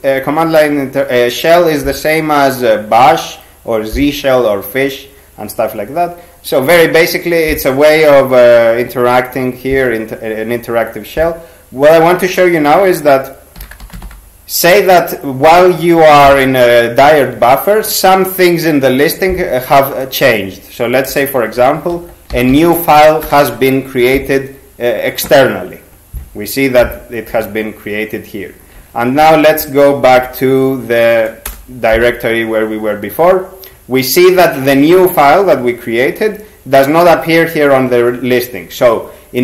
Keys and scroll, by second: 13.4-14.5 typing, 21.1-24.5 typing, 23.3 Return, 28.8 ctrl+x, 29.2 b, 31.5 Return.